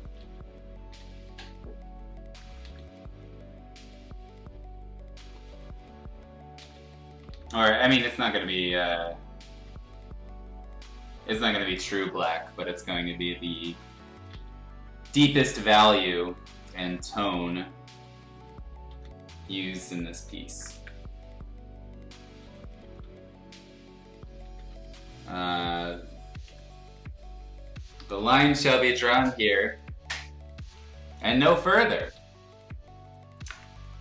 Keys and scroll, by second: 0.1 ctrl+z, 0.9 [, 1.0 [, 2.6 ctrl+z, 5.2 ctrl+z, 6.6 ctrl+z, 7.3 ctrl+z, 7.9 ctrl+z, 8.7 ctrl+z, 9.5 ctrl+z, 10.9 ctrl+z, 12.1 space, 12.5 r, 13.0 b, 16.4 ctrl+z, 17.3 ctrl+z, 18.9 ctrl+z, 19.9 space, 20.3 r, 20.7 b, 22.8 ctrl+z, 24.2 ctrl+z, 24.4 ctrl+z, 24.7 x, 25.6 x, 26.4 ctrl+z, 27.9 Escape.